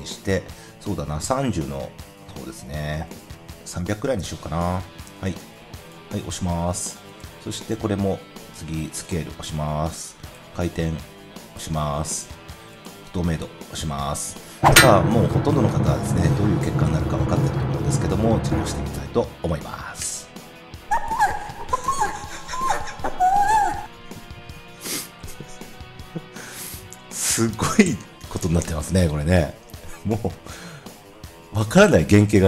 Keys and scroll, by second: 3.5-4.5 typing, 19.9 0.